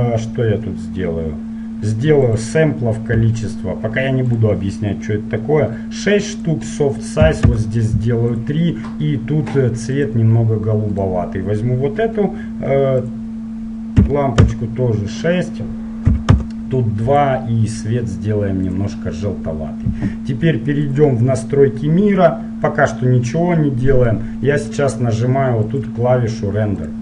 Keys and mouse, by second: 3.6-8.4 drag, 8.5-10.4 drag, 11.2-13.2 right drag, 13.2-15.1 drag, 15.4-19.2 drag, 21.1-22.9 drag, 24.3-25.8 middle drag, 25.8-27.0 drag.